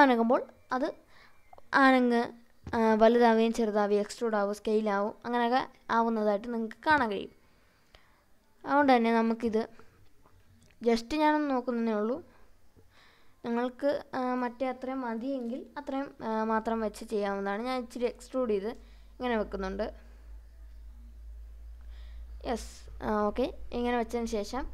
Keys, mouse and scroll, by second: 0.2 click, 1.8 shift+click, 3.6 s, 7.2 click, 7.8 click, 9.1 s, 10.1 click, 11.1 click, 12.9 s, 23.2 click, 23.9 middle click, 24.6-24.7 scroll up 3.